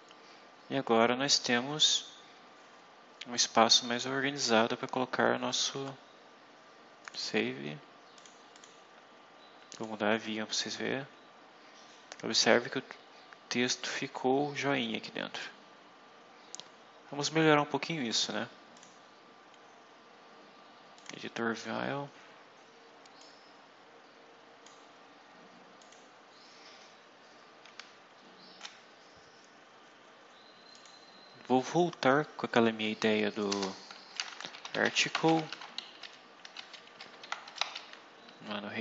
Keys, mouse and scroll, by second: 0.0-1.6 scroll up 4, 3.8-5.2 scroll down 8, 5.3-5.9 scroll up 4, 6.9 click, 8.1 click, 8.5 click, 9.7 click, 12.8-15.4 scroll down 10, 16.2-17.6 scroll up 6, 18.7 click, 20.9 click, 23.1-24.8 drag, 25.7 click, 27.7 scroll down 2, 28.8 scroll down 2, 30.7 click, 33.5 Return, 34.0-35.9 typing, 36.4 Home, 36.5 Down, 36.9 Right, 37.4 shift+Left, 37.7 shift+Down.